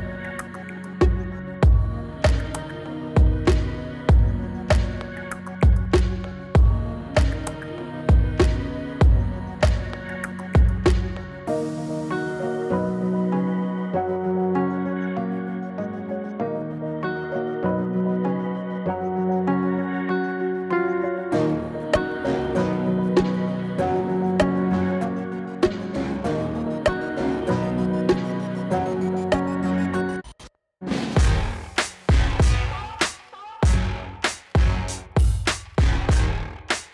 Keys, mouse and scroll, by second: 1.7 space, 2.7-3.9 drag, 5.8 click, 6.7-9.5 alt+drag, 10.7-11.2 shift+drag, 14.3-15.3 shift+drag, 18.7 click, 21.7 m, 26.5 click, 35.8-36.2 scroll down 1.